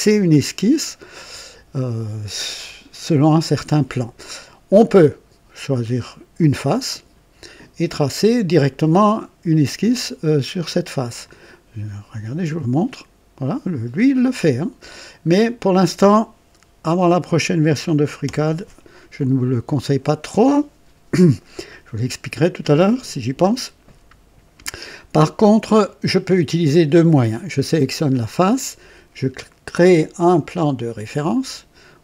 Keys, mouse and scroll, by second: 0.7-1.9 drag, 3.8 click, 11.2 click, 12.7 click, 14.8 click, 18.2 Delete, 18.2 Delete, 19.4-20.3 drag, 25.1-26.0 drag, 27.9 click, 31.3 click.